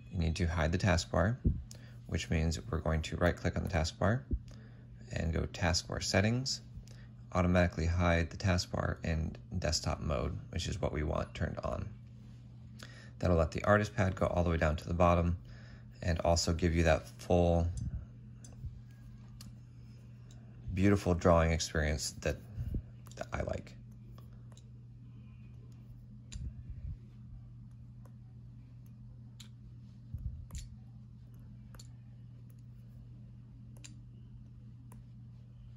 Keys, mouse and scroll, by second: 0.0 typing, 3.6-4.3 typing, 17.6 right click, 20.0 shift+t, 22.7 ctrl+z, 23.0 ctrl+z, 24.2-25.2 typing, 29.3 typing, 30.4 typing, 31.6 typing.